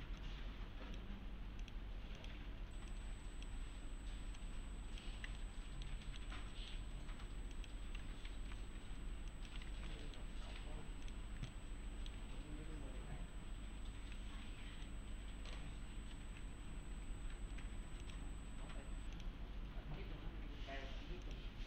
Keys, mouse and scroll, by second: 0.5-1.1 click, 4.7-5.3 click, 5.2 scroll down 1, 5.4-6.0 alt+middle click, 6.3-7.0 alt+middle click, 6.9 scroll up 1, 7.6 click, 8.3 ctrl+alt+c, 9.3 click, 9.7 ctrl+alt+c, 10.0 middle click, 11.0 click, 11.5-12.1 alt+middle click, 14.9-15.8 middle click, 16.1 alt+g, 18.0 click, 21.2 click.